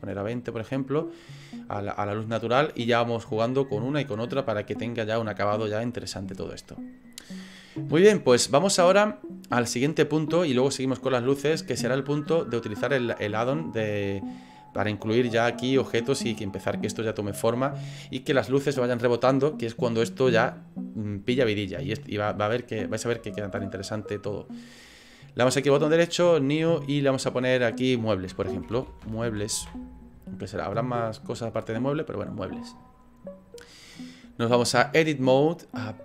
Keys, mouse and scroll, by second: 6.8 right click, 12.8 click, 25.5 right click, 27.1 click, 34.9 click.